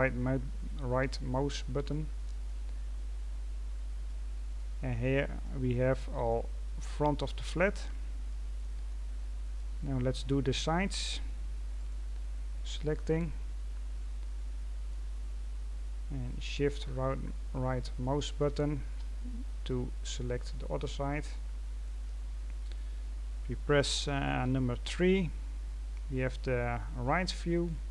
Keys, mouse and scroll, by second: 1.8 middle click, 2.8-4.0 scroll up 5, 4.0 middle click, 4.8-5.4 scroll down 2, 5.4-6.5 middle drag, 6.5-7.7 scroll up 2, 7.7-8.2 scroll down 5, 8.2 middle click, 9.1-9.5 scroll down 1, 9.5 middle click, 10.4-11.7 scroll up 3, 11.7 right click, 12.8-13.5 scroll down 3, 13.5-14.2 scroll down 6, 14.2-15.2 middle drag, 15.2-16.8 scroll up 7, 16.8-18.2 scroll up 1, 18.2 shift+right click, 19.5 scroll down 4, 20.4-22.1 middle drag, 22.1-24.4 scroll down 2, 24.4 KP_3, 25.8-26.7 scroll up 7, 26.7-27.2 scroll up 2, 27.2-27.6 scroll up 3, 27.6-27.9 scroll down 2.